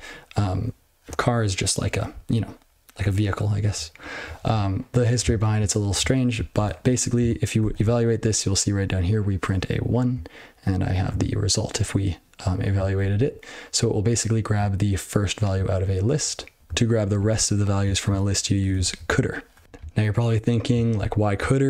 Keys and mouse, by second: 4.2 ctrl+n, 4.4 ctrl+n, 5.3 ctrl+alt+b, 6.5 ctrl+e, 7.5 ctrl+e, 10.1 click, 11.0 click, 12.9 ctrl+p, 13.1 ctrl+p, 15.5 click, 15.7-16.4 typing, 16.1 click, 16.6 click, 17.1 ctrl+e, 18.8 ctrl+alt+b, 20.9-21.3 ctrl+f.